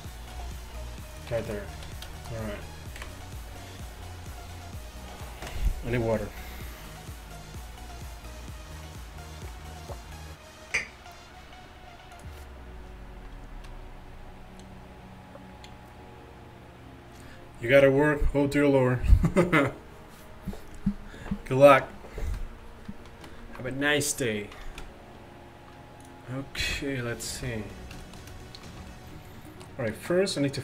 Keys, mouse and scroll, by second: 0.4 g, 1.8 a, 3.0 KP_1, 27.4 t.